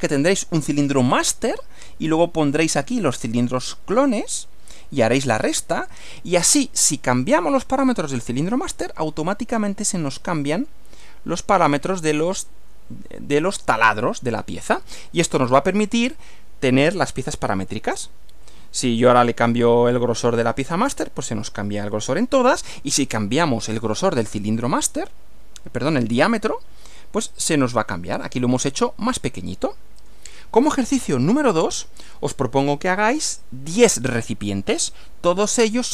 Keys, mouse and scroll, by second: 15.4 Right, 30.0 click, 31.0 Right.